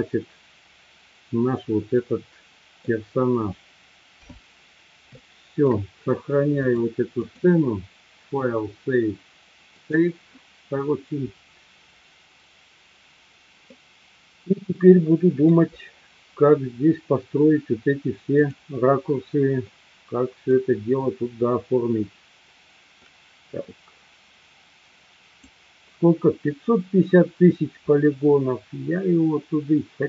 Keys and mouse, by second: 2.0 middle click, 5.2-5.9 shift+middle drag, 7.2-10.8 drag, 13.7-15.6 middle drag, 18.5 click, 19.7 middle click, 24.6-28.3 drag.